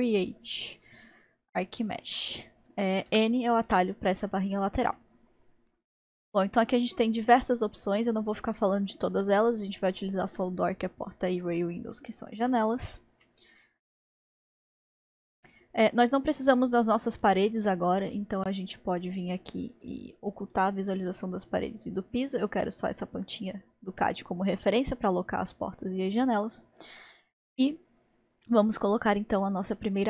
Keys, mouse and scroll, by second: 1.8-3.1 drag, 3.1 n, 3.7 n, 3.8 n, 13.3-18.1 middle drag, 20.4 click, 21.6 click, 24.0-24.7 scroll up 2, 30.0 click.